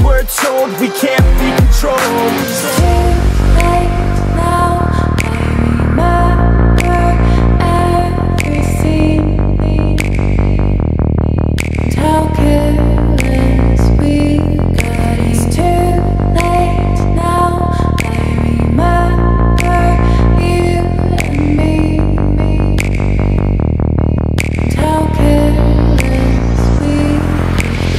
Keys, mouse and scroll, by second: 0.5 ctrl+=, 2.8-8.6 drag, 8.6 ctrl+-.